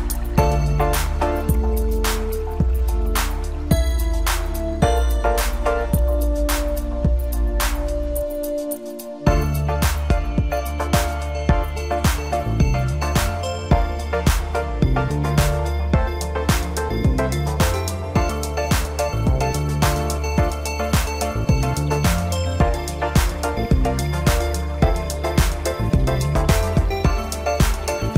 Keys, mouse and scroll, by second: 0.2-0.5 scroll up 1, 0.9 click, 2.1 l, 3.3 drag, 4.0 click, 5.0 click, 5.8-6.7 scroll down 2, 6.7 click, 7.4 click, 7.8 scroll down 2, 8.1-10.4 middle drag, 10.4 click, 10.9-12.1 middle drag, 12.1 ctrl+KP_Add, 12.7 ctrl+KP_Add, 14.8 drag, 15.4 click, 16.0 middle click, 16.9 click, 18.2 scroll down 1, 18.8 click, 19.4 click, 19.9 scroll down 3, 20.2-21.2 middle drag, 21.2 click, 21.6 scroll up 1, 22.1-24.0 middle drag, 24.0 Tab, 24.9 click, 25.4 click, 27.0 shift+click, 27.9 ctrl+l.